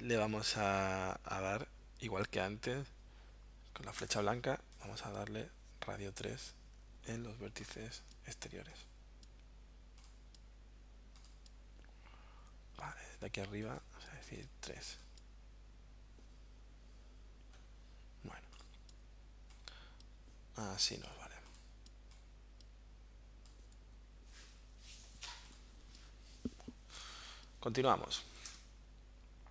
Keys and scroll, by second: 4.0 a, 27.0 space.